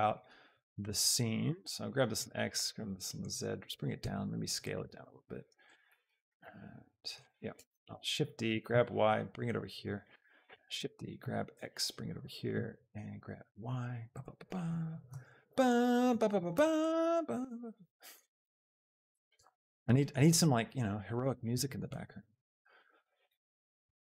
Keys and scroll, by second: 1.5 shift+g, 1.8 x, 2.6 z, 4.0 s, 8.1 Escape, 8.1 shift+d, 8.4 g, 8.8 y, 10.6 shift+d, 11.4 g, 11.7 x, 13.6 y, 15.4 z, 16.5 shift+x.